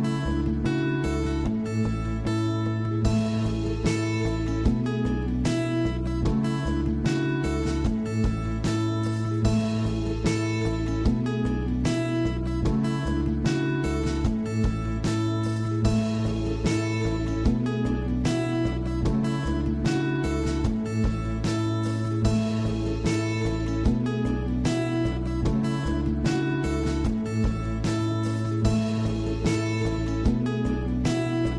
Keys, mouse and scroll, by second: 0.8-2.1 scroll down 10, 1.1 click, 1.5 middle drag, 2.1 click, 2.5-3.1 scroll up 3, 3.1 click, 4.1 scroll down 5, 4.3 middle drag, 4.6-5.6 scroll up 10, 5.1 shift+middle drag, 5.6-6.0 middle drag, 6.0-6.4 scroll down 3, 6.4 shift+a, 11.4-14.0 drag, 14.0-14.6 scroll up 5, 14.6 shift+middle click, 15.0 scroll down 1, 15.2-18.2 middle drag, 18.5 click, 21.0 click, 24.9 click, 26.2-28.5 drag, 29.3-30.1 scroll up 5, 30.1 scroll down 2, 30.4-31.5 shift+middle drag.